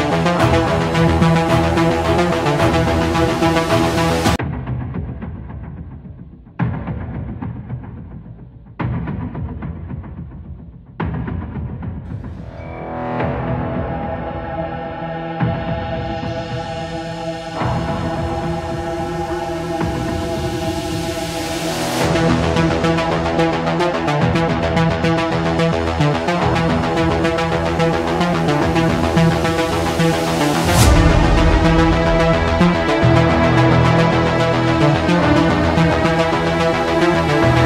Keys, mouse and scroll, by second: 1.4 Escape, 3.7-4.8 drag, 6.4 click, 8.6-9.8 typing, 10.6 Return, 12.9 click, 14.8 click, 17.5-19.0 typing, 20.0 Return, 29.3 click, 30.0 click, 30.8 middle click, 30.8 middle click, 30.9 middle click, 31.4 scroll, 31.6 middle click, 34.0 Escape, 35.3 Escape, 36.8-37.6 drag.